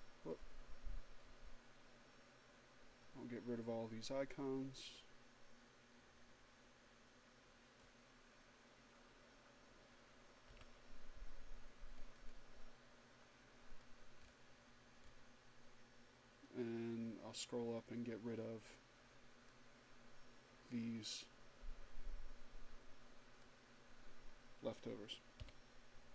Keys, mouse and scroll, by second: 0.1-0.7 scroll down 2, 1.3 scroll down 1, 3.0-8.0 drag, 10.3 Delete, 11.8-12.6 scroll up 2, 13.6 click, 14.1-14.6 scroll up 2, 15.1 scroll up 2, 17.7-20.3 drag, 20.6-23.7 drag, 25.2 Delete.